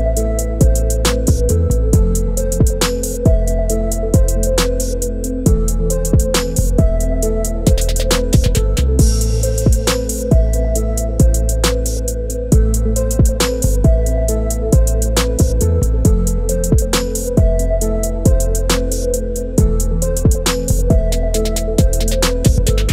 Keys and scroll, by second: 1.3-4.1 typing, 9.9-13.5 typing, 20.8 5.